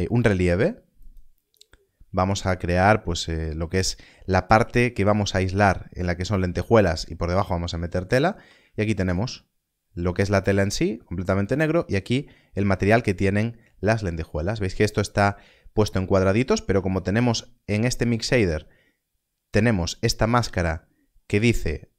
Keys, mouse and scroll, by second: 8.0 scroll up 1, 11.4 ctrl+shift+click, 17.9 ctrl+shift+click, 19.5 ctrl+shift+click, 20.8-21.9 scroll up 1.